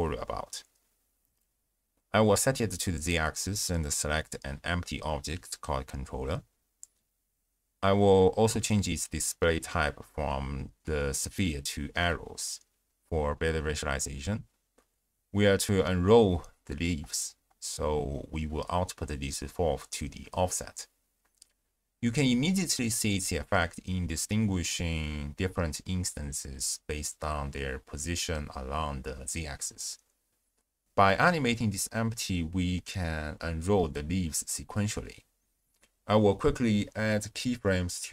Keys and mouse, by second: 0.8-2.6 drag, 3.3 click, 5.1 click, 5.6 click, 7.1 click, 7.7 click, 8.8 click, 9.5-10.8 drag, 18.1-19.6 drag, 20.8-21.3 drag, 21.5 shift+drag, 31.0 g, 31.3 z, 37.9 alt+g, 37.9 click.